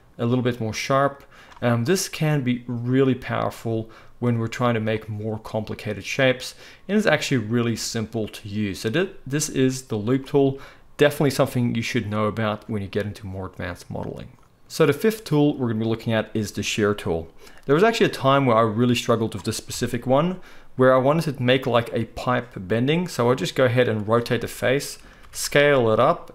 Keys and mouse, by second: 4.9-14.4 middle drag, 14.4-24.2 drag, 19.7 KP_1, 23.2 r, 24.2-26.3 shift+middle drag, 25.2 s.